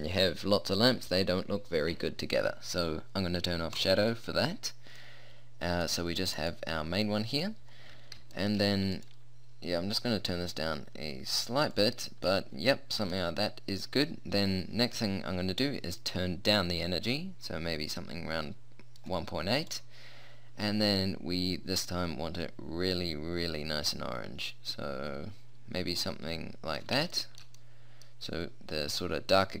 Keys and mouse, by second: 1.5-3.9 middle drag, 3.9-5.2 drag, 5.2 middle click, 6.6 click, 7.2-9.3 right drag, 9.3 r, 12.4-15.6 middle drag, 15.6-17.6 drag, 19.8-27.4 drag.